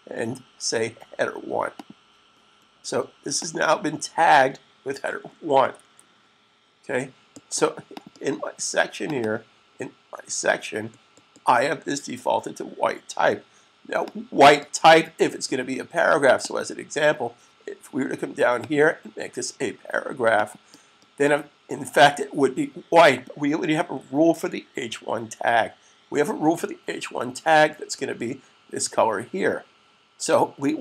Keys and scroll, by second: 5.6 super+s.